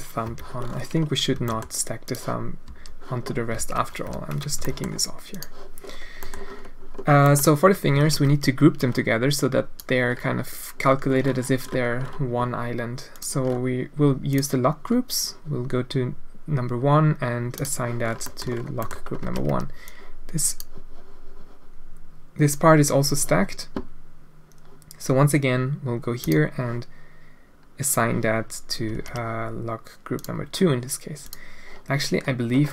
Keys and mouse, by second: 0.4 alt+a, 0.4 l, 2.1 g, 2.7 a, 3.6 alt+a, 4.1 l, 4.6 g, 6.2 click, 7.2 click, 8.0 alt+a, 8.2 b, 13.1 click, 14.3 click, 17.6 click, 18.3 middle click, 18.9 click, 19.2 alt+a, 19.4 b, 26.3 click, 29.0 ctrl+z, 31.2 ctrl+z, 31.3 click.